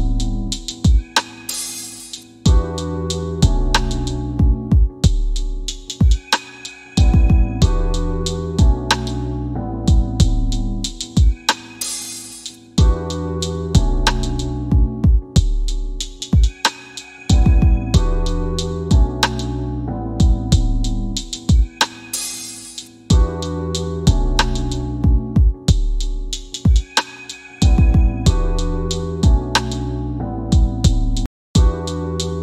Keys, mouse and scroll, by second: 5.3 KP_5, 5.5 KP_Enter, 6.5 click, 23.3 w, 25.0-26.1 typing, 25.8 scroll down 1, 26.8 middle click, 28.0 click, 29.2 click, 29.5 right click, 30.7 click, 31.6 alt+middle click.